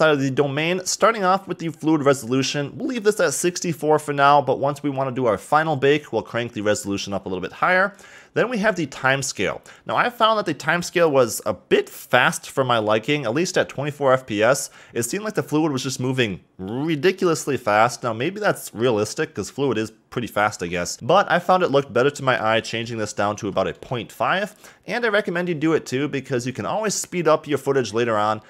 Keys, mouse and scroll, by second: 21.7-24.7 drag.